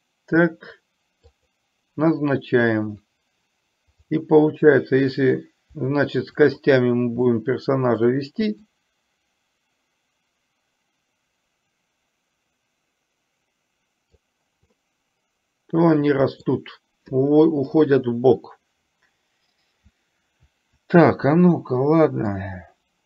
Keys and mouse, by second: 1.4 click, 4.2 drag, 6.4 shift+click, 7.3-8.2 shift+middle drag, 8.7 click, 8.9-14.3 drag, 14.8-16.5 middle drag, 22.5-23.0 drag.